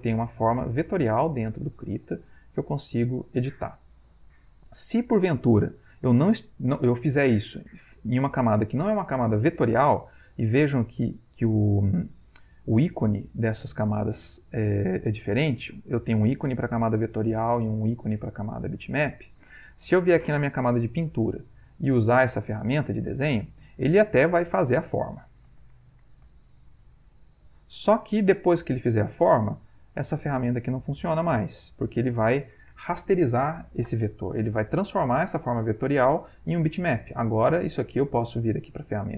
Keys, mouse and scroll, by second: 0.2 click, 1.4-3.2 drag, 3.4-4.4 drag, 5.4 click, 19.5 click, 20.3 click, 22.0 click, 22.8 click, 23.3 click, 24.2-26.9 drag, 27.4 click, 29.9 click, 30.8-32.5 drag, 33.9 click, 34.4 click, 34.9 click, 35.3 click, 35.7-37.0 drag, 38.1 click.